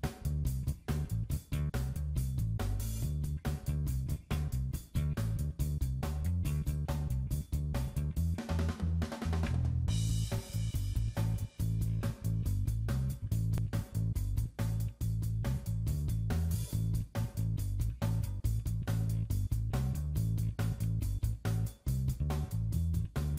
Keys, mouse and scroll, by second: 0.2 click, 1.2 click, 2.7 click, 3.7 shift+click, 5.3 middle click, 5.6 middle click, 5.9 middle click, 6.0-6.5 scroll up 2, 6.2 click, 7.6 shift+click, 9.0 click, 9.9 shift+click, 11.9-12.6 scroll down 9, 12.6 middle click, 13.8-14.8 scroll up 9, 14.3 middle click, 15.2 click, 21.3-21.6 scroll down 2, 21.6 click, 22.3-22.8 scroll down 5.